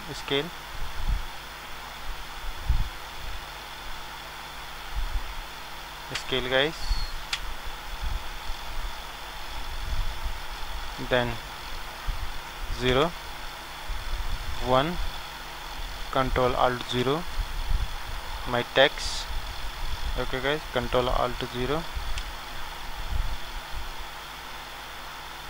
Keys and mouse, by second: 3.3-5.2 drag, 11.4-13.4 drag, 12.9 KP_0, 14.4 KP_1, 16.9 ctrl+alt+KP_0, 20.1-21.9 drag, 22.1 ctrl+alt+KP_1.